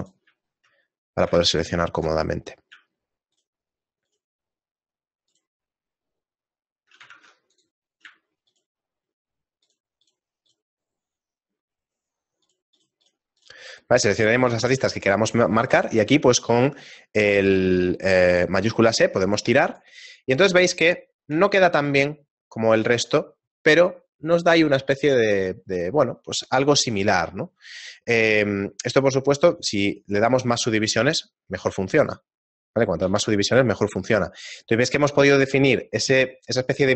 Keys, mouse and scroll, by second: 0.3 click, 0.4 shift+middle click, 1.6 ctrl+alt+right click, 3.4 shift+right click, 4.1 shift+right click, 4.4 ctrl+alt+right click, 4.6 shift+middle click, 5.8 shift+right click, 6.3 shift+middle click, 7.2 ctrl+Tab, 8.5 shift+right click, 8.8 shift+middle click, 9.9 shift+right click, 10.1 shift+right click, 10.6 shift+right click, 10.9 shift+middle click, 12.1 shift+middle click, 12.6 shift+right click, 12.9 shift+right click, 13.8 shift+middle click, 16.0 shift+e, 20.2 shift+middle click, 21.6 Tab, 21.6 scroll down 2, 21.8 shift+middle click, 22.1 scroll down 2, 23.6 scroll down 1, 29.6 click, 30.9 click, 33.4 shift+middle click, 34.6-35.5 scroll up 5.